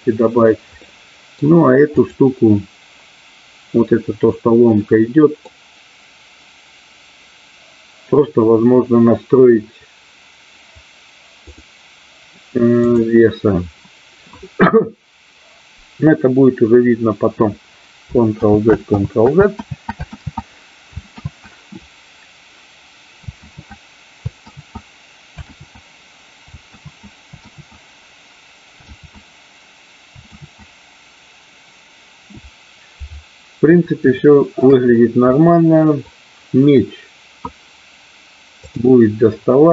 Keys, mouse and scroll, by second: 0.8 middle click, 1.9 click, 5.0 middle click, 11.5-12.8 drag, 19.7 ctrl+z, 21.3 ctrl+z, 23.0 ctrl+z, 24.8 ctrl+z, 26.5 ctrl+z, 28.2 ctrl+z, 29.8 ctrl+z, 31.5 ctrl+z, 33.3 ctrl+z, 34.2 shift+middle click, 35.3 middle click.